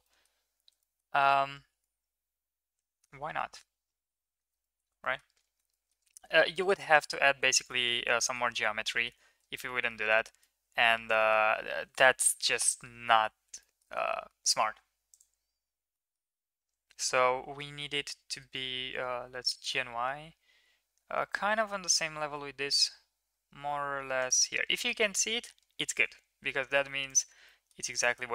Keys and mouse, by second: 0.2 shift+middle drag, 1.0 middle drag, 1.9-3.1 middle drag, 4.4 middle click, 4.6 shift+middle click, 5.2 middle click, 5.9 middle click, 8.2 middle drag, 8.9 middle click, 9.7 middle drag, 10.6-11.3 middle drag, 12.2 KP_3, 13.8 shift+middle click, 15.1 middle click, 15.9 shift+middle click, 27.1 click, 27.4 middle click, 28.0 shift+middle click.